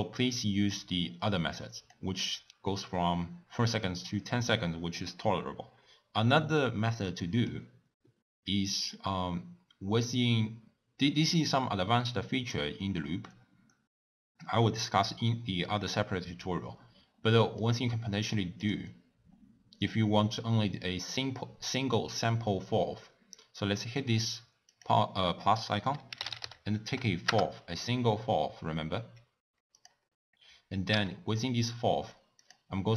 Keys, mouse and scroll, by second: 1.1 click, 28.8 l.